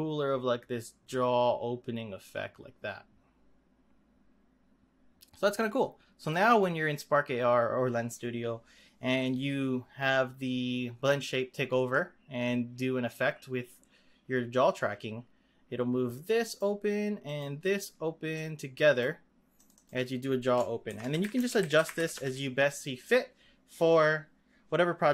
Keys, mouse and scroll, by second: 6.1 click, 11.9-14.9 drag, 17.2 click, 18.3-19.6 drag, 19.7-22.9 drag.